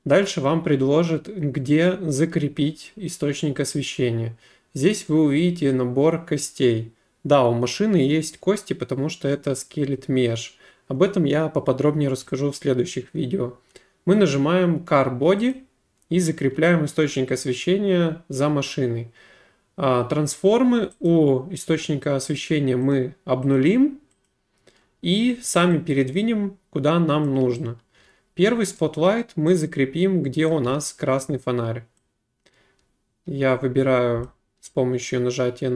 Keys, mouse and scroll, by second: 15.5 click, 21.1 click, 22.9 click, 23.6 click, 24.3 click, 27.3 click, 28.0 w, 28.8 right click, 30.5 click, 30.7 e, 34.2 click.